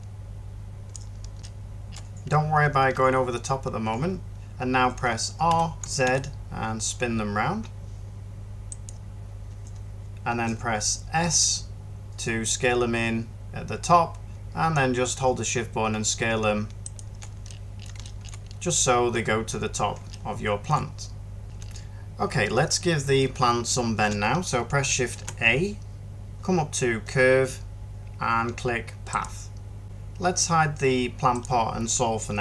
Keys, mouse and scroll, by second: 5.4 r, 5.9 z, 11.1 s, 25.0 a.